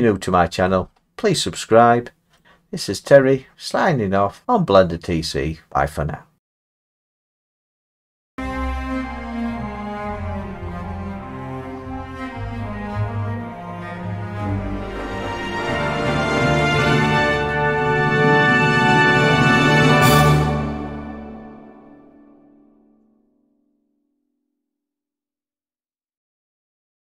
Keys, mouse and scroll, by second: 0.6-1.3 scroll, 1.8 middle click, 2.4 middle click, 2.4 middle click.